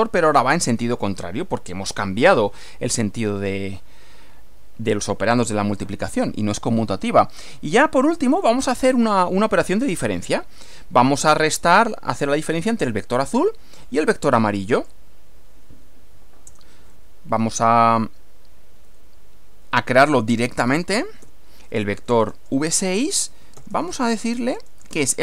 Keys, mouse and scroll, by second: 1.0-2.1 middle drag, 8.3 click, 14.8 click, 16.5 Return, 20.4-25.2 typing.